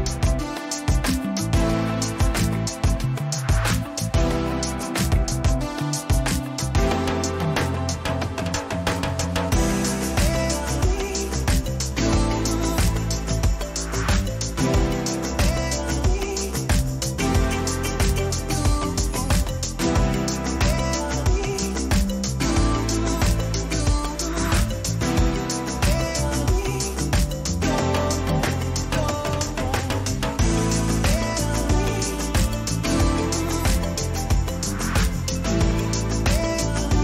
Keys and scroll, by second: 2.0 Return, 6.3 ctrl+alt+z.